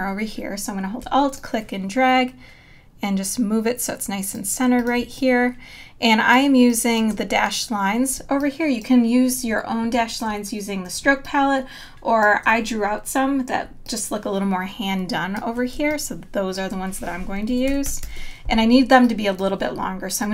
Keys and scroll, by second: 5.0 space, 11.0 space, 15.8 space, 17.7 super+=, 18.7 space.